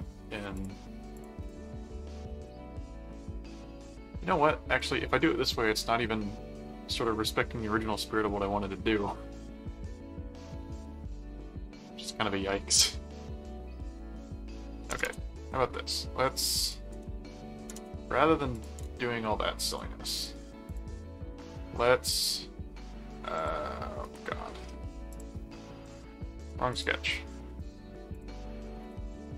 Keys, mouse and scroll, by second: 0.6 click, 1.3 click, 1.4 right click, 1.9-3.7 middle drag, 4.2 middle click, 15.0 Return, 16.4 click, 17.8 Return, 18.5 click, 18.8 Return, 19.7-21.2 drag, 23.3 click, 24.0 right click, 25.1 click, 25.5 ctrl+1, 26.4 click, 27.5 ctrl+4, 28.1 click, 28.8 click.